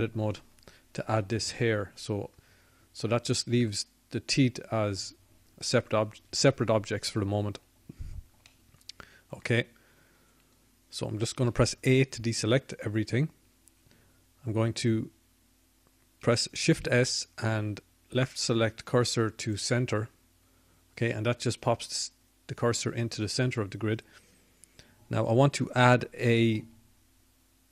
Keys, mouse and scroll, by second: 1.2 Tab, 14.8 middle click, 17.5 a, 22.6 shift+s, 25.5 shift+s.